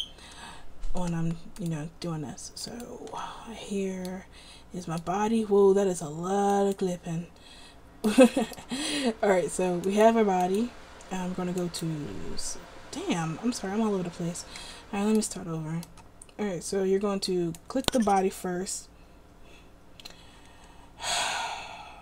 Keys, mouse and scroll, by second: 6.8-8.2 right drag, 10.1-13.6 middle drag, 14.8 a, 15.4-18.1 middle drag.